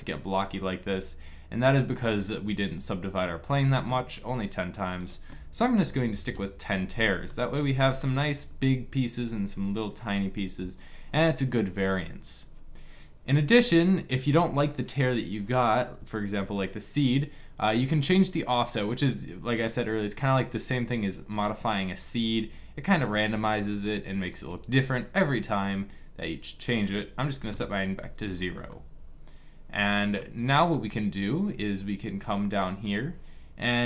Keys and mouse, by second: 1.8-2.9 middle drag, 2.9-7.5 drag, 17.6-28.4 drag, 28.4-29.7 middle drag, 29.7 click, 29.9-31.7 middle drag.